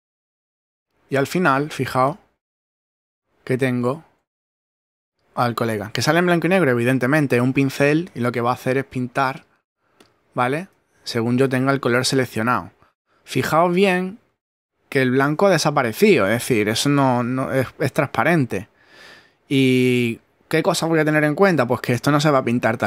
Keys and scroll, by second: 4.5 super+z, 5.7 super+z, 11.8 super+z.